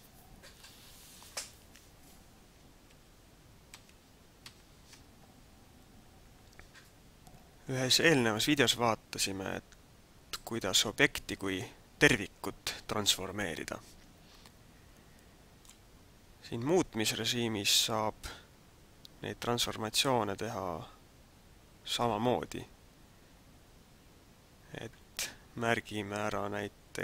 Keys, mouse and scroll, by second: 2.9 ctrl+z, 3.9 ctrl+z, 4.5 ctrl+z, 9.4-9.7 scroll down 1, 10.3 middle click, 20.0 middle click.